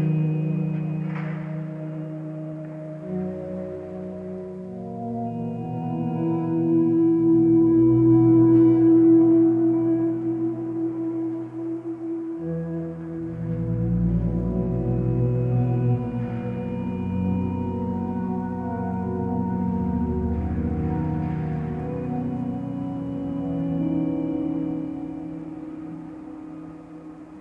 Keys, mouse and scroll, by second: 10.8 ctrl+space, 14.2 ctrl+space, 20.1 ctrl+space, 21.7 ctrl+;.